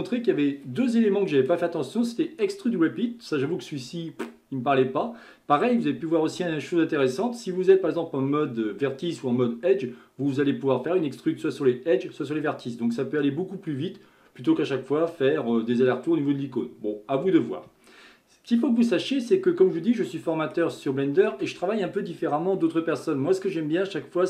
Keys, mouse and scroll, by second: 19.0-19.4 scroll down 2, 19.4-24.0 middle drag.